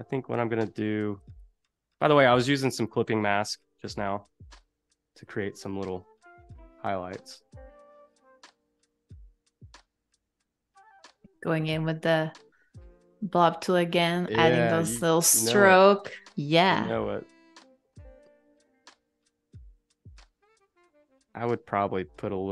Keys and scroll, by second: 1.1 z, 2.2 space, 3.9 shift+b, 5.0 ].